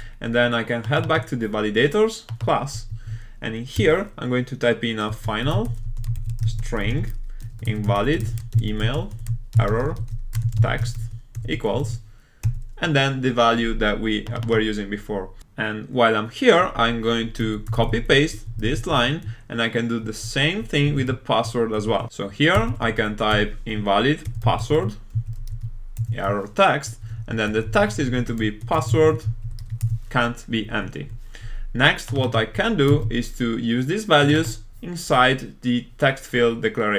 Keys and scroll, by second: 11.8 super+v, 17.8 super+c, 18.8 super+v, 32.9 super+c.